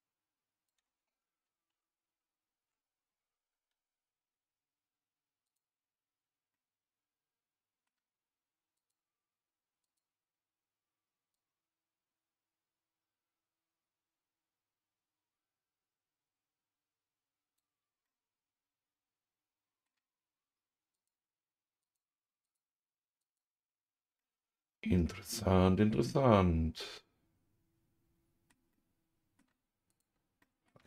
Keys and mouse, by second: 1.7 ctrl+z, 2.1 ctrl+z, 5.4-6.5 drag, 6.5-7.9 middle drag, 9.8 click, 11.3 click, 12.4-18.0 drag, 18.0-19.8 middle drag, 20.9-22.2 drag, 22.4 click, 23.2 click, 24.1-28.5 middle drag, 28.7 middle click, 29.9 click, 30.4 middle click.